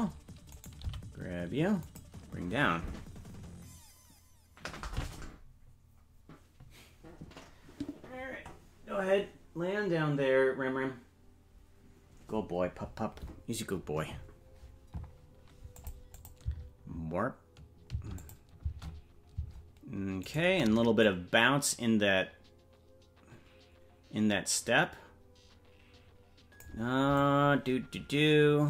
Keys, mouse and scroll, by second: 0.5 right click, 0.8 g, 15.7 click, 16.1 click, 16.4 space, 18.2 click, 18.2 space, 18.6 space, 20.2 space, 20.4 right click, 21.0-26.7 drag, 27.1-28.6 drag.